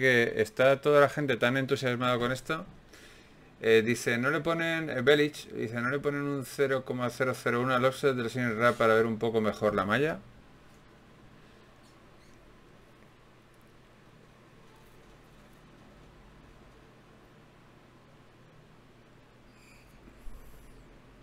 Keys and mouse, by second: 9.8-11.0 right drag, 12.6 click, 13.2 n, 14.0 n, 19.8-21.2 drag.